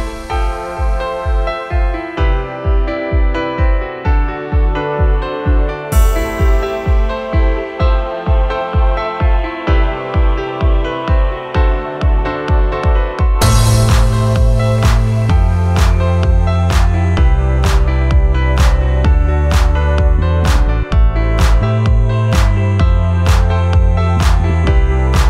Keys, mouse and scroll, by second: 6.8 ctrl+0, 23.6 click, 24.2 click, 24.9 ctrl+z.